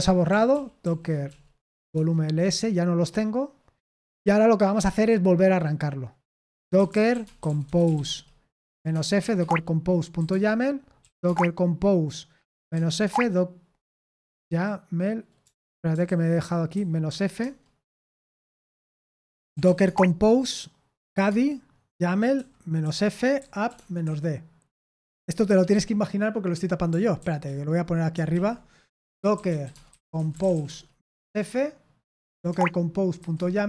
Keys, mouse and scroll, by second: 0.5 ctrl+p, 0.8 ctrl+p, 1.2 ctrl+p, 1.9 Return, 6.2-14.1 typing, 10.2 Tab, 15.4 BackSpace, 16.0 ctrl+w, 16.7-17.4 typing, 19.1-26.2 typing, 27.2 ctrl+c, 28.3 ctrl+l, 28.7-33.6 typing.